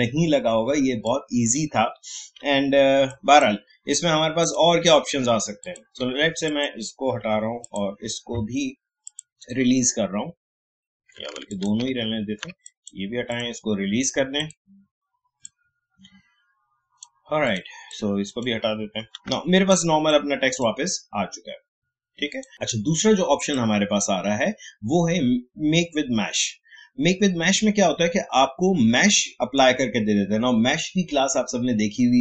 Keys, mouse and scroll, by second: 2.3 Delete, 3.1-4.4 drag, 7.2 Delete, 7.6 click, 11.5 click, 11.9 ctrl+z, 12.6-19.1 drag, 19.1 Delete, 19.7-22.5 drag.